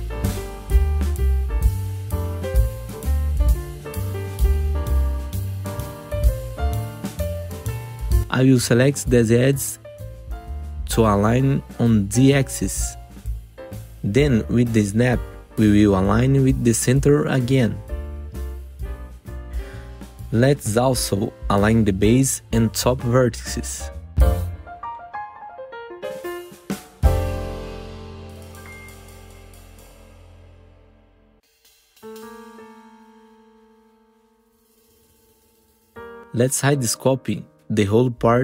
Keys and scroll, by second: 0.6 4, 1.7 Delete, 2.3 5, 3.1 Delete, 3.7 f, 5.3 1, 5.5 F3, 7.2 2, 9.1 ctrl+z, 12.0 ctrl+z, 14.0 s, 15.4 s, 15.8 F3, 18.6 F3, 19.2 1, 24.0 F3, 24.5 1, 24.9 F4, 28.2 F4, 28.9 ctrl+t, 29.4 alt+q, 30.0 F4, 35.2 F4, 35.7 F4, 36.1 F4, 37.1 F4, 38.0 3.